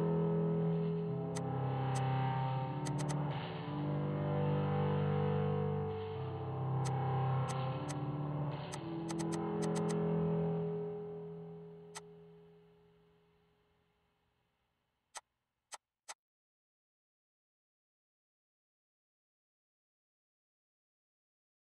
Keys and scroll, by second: 0.0-0.7 typing, 2.2-3.0 typing, 3.7 Delete, 6.6 p, 8.9 space, 11.1 ctrl+g, 14.5 m, 16.8-18.8 typing.